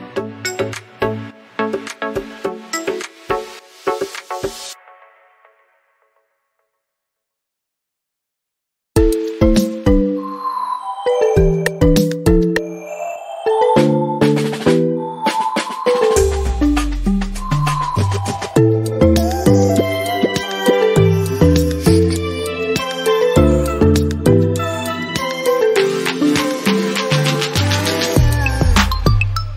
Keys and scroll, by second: 5.1 Up, 14.5 Up, 15.5 Right.